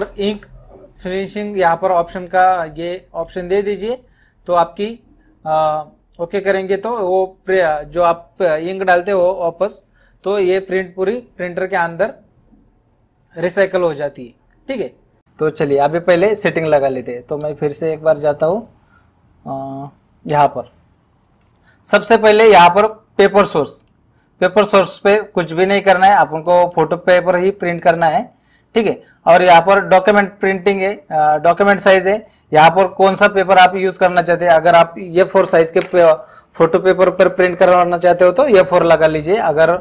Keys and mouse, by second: 17.4 right click, 18.5 click, 26.5 click, 32.0 click.